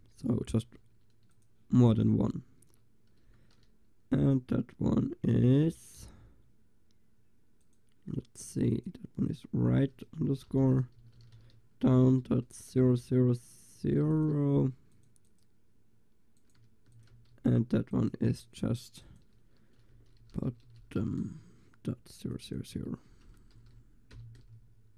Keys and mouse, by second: 0.0 l, 1.4-3.2 drag, 2.0 a, 3.3 l, 4.3-6.5 drag, 7.7-14.1 drag, 14.1 ctrl+s, 15.0-16.8 drag, 16.9 ctrl+s, 20.5 click, 20.7 t, 23.7 0.